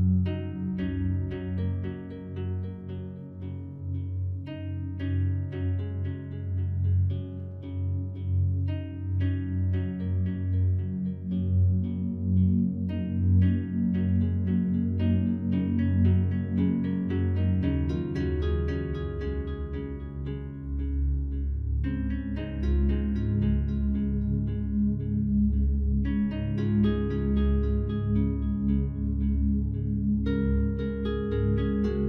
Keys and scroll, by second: 25.0 ctrl+u.